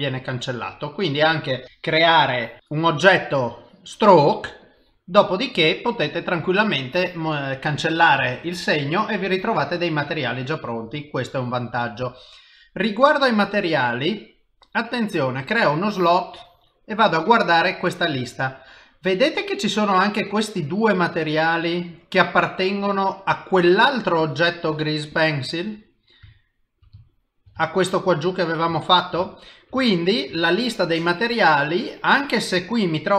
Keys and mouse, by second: 2.1 click, 2.6 click, 3.4 click, 4.6 click, 5.4 middle click, 11.2 middle click, 15.7 click, 17.0 click, 24.2 click, 24.7 click, 25.1 click, 25.7 middle click, 26.4 shift+middle click, 27.0 ctrl+middle click, 27.6 shift+middle click, 28.8 ctrl+middle click, 29.3 shift+middle click, 29.9 ctrl+middle click, 30.4 shift+middle click, 32.2 middle click.